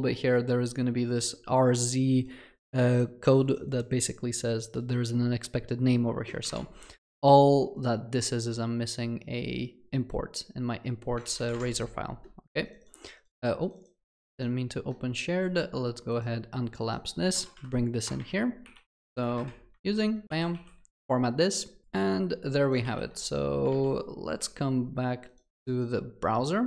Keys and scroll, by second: 19.8 ctrl+v, 20.5 ctrl+alt+l.